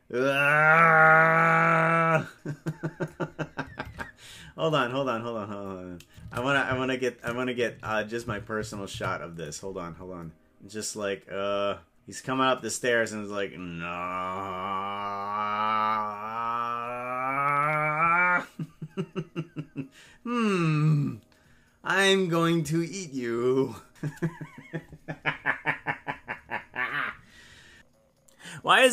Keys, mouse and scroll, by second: 4.0 shift+`, 6.3 shift+`, 10.3-11.7 drag.